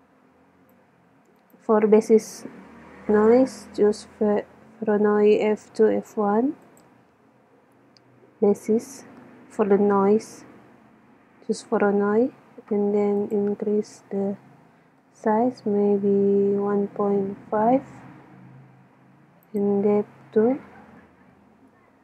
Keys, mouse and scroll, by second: 1.4-3.1 drag, 13.3-15.1 drag, 19.5-21.4 drag.